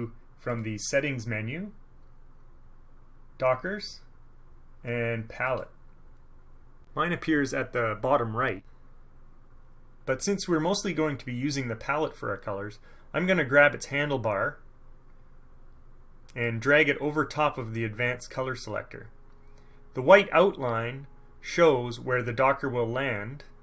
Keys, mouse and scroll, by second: 0.7 scroll up 1, 5.6 middle click, 16.6-18.5 middle drag, 18.5-23.6 drag.